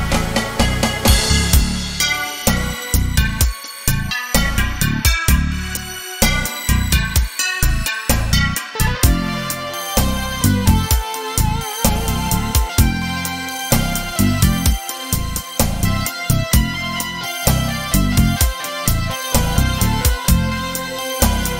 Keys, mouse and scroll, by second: 2.9-16.5 drag, 16.5 middle click, 17.0 scroll down 1, 17.7 scroll up 1, 17.8 middle click, 20.0-21.5 drag.